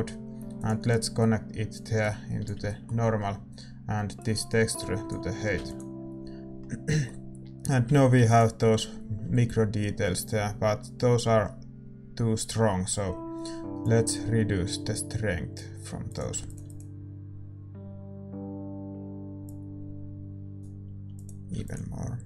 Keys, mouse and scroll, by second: 5.6 ctrl+s, 16.6 ctrl+s, 16.6-22.2 drag, 21.7 ctrl+s.